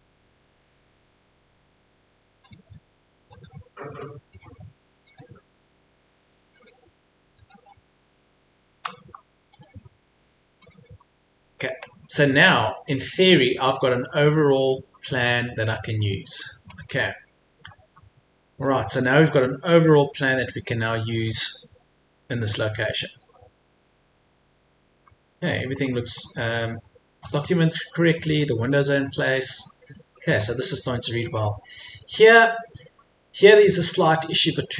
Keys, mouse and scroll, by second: 1.1-2.4 scroll up 1, 2.4 click, 9.1 Escape, 9.5 click, 11.4 scroll down 1, 12.3 middle click, 13.1-13.6 scroll down 1, 13.6-14.2 scroll up 1, 14.2-15.9 middle drag, 15.9-16.7 scroll up 1, 16.7-17.4 scroll down 1, 17.4-17.7 scroll up 1, 17.7 middle click, 18.3-19.7 scroll down 1, 19.7 scroll up 1, 22.5 middle click, 23.8-24.9 scroll up 1, 25.1 middle click, 25.7 scroll up 1, 26.6 middle click, 27.4-27.9 scroll down 1, 27.9-30.3 middle drag, 30.3-31.4 scroll up 1, 31.4-31.8 scroll down 1, 32.6 middle click, 33.3 scroll down 1, 34.0-34.7 scroll up 1.